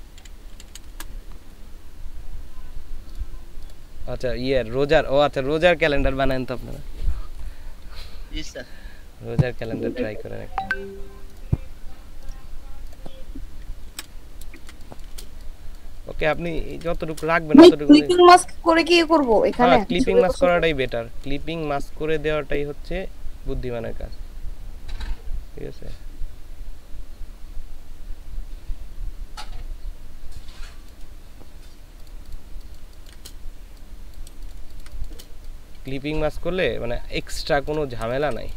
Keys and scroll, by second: 0.0-0.9 typing, 13.9 ctrl+v, 14.6 ctrl+space, 16.0 space, 32.6 ctrl+space, 34.3 space, 38.1 ctrl+shift+space.